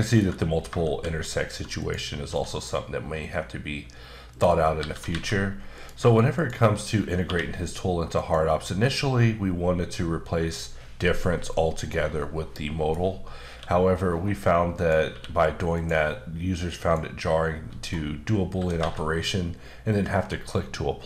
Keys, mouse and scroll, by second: 0.9 shift+a, 1.8 click, 2.2 s, 4.3 click, 4.8-5.1 typing, 5.7 click, 6.3 shift+click, 7.2 q, 8.1 click, 8.8 middle click, 13.5 q, 14.7 click, 15.1 q, 15.7 click, 16.3-16.8 scroll down 1, 16.8 click, 17.5-18.4 scroll up 2, 18.4 scroll up 1, 18.5 typing, 20.3 click.